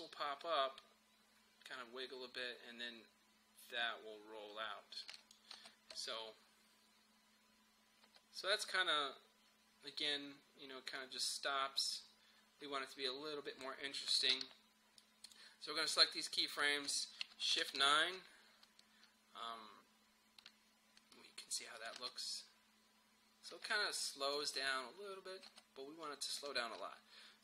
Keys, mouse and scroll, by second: 5.6 space, 8.1 space, 8.7-14.4 drag, 14.4 v, 15.0-17.6 drag, 17.6 shift+F9, 21.1 click, 22.0 space, 24.1 click, 24.4 space.